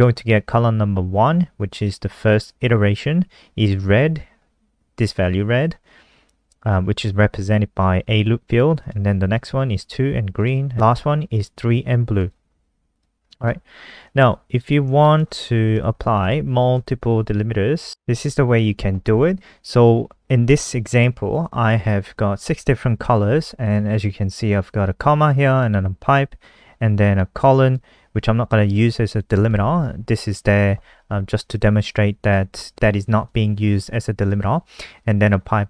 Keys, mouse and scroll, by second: 8.8 click, 13.1-14.0 scroll down 2, 14.6-15.6 scroll up 2, 15.1 shift+click, 16.9 shift+Home, 17.0 shift+Up, 17.2 shift+Up, 17.3 shift+Up, 17.4 shift+Up, 17.6 shift+Up, 17.8 ctrl+v, 24.6 click.